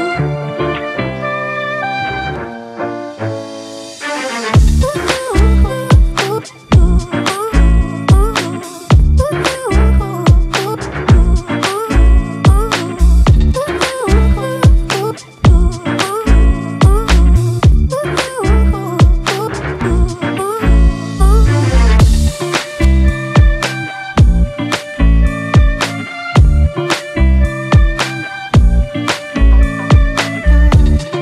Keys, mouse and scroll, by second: 0.2 scroll up 1, 2.3 click, 2.8 click, 6.4 click, 6.6 scroll up 2, 7.2 click, 7.8 click, 8.6 click, 9.5 click, 11.0 click, 12.1 click, 13.9 click, 14.4 scroll down 3, 15.7 click, 15.9 scroll up 2, 16.4-17.5 drag, 18.9 click, 19.0-19.6 scroll down 1, 19.6 click, 20.9 click, 23.6 click, 24.5 click, 27.9 click, 28.3 scroll up 2, 29.0 click, 29.7-30.5 drag, 31.1 click.